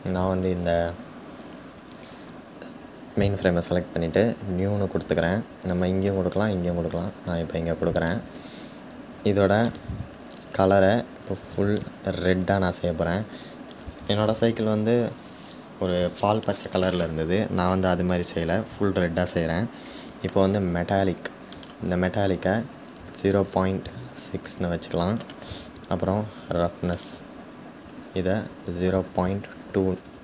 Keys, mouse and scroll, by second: 7.8-11.3 drag, 24.0 click.